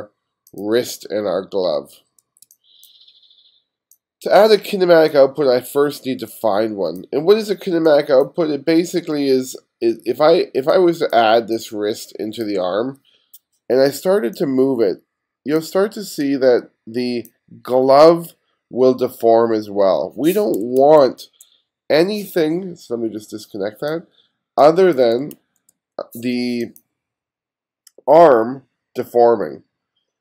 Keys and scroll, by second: 2.5 space, 7.8 space, 20.8 super+z, 25.4 super+z.